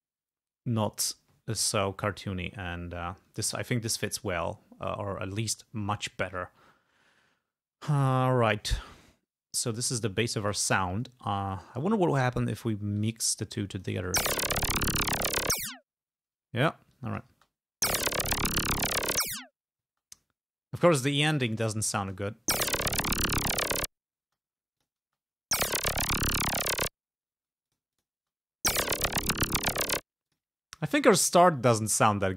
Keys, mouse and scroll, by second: 8.7-10.0 drag, 10.5 click, 12.2 click, 13.0 click, 13.6 click, 14.0 space, 16.3 space, 17.0 click, 17.4 space, 19.9 space, 21.5 click, 22.0 space, 24.3 space, 24.8 click, 25.1 space, 27.4 space, 27.7 click, 28.2 space, 30.1 space, 30.3 click, 30.8 scroll up 2, 32.2 scroll down 2.